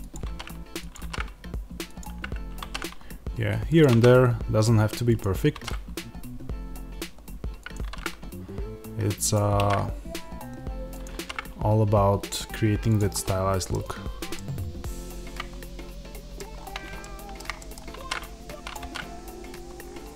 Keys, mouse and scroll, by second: 0.0 click, 0.8 click, 1.9 click, 5.1 click, 7.6 click, 9.2 click, 10.9 click, 12.8 click, 13.0 middle click, 13.6 scroll, 14.2-16.4 middle drag, 16.4 scroll, 17.5-18.6 middle drag, 18.6 click, 20.1 click.